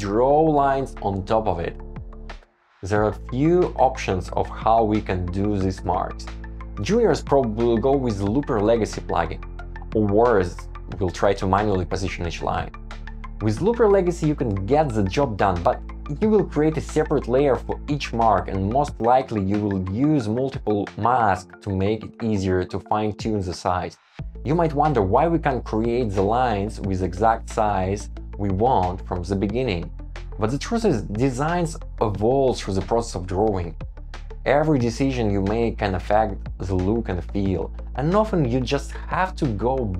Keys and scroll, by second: 0.1 shift+Down, 1.0 shift+Up, 3.6 Return, 4.7 shift+Down, 5.2 shift+Up, 5.5 Escape, 9.4 Return, 20.9 Return, 24.0 super+v, 27.6 Return, 31.3 Escape, 34.7 Escape.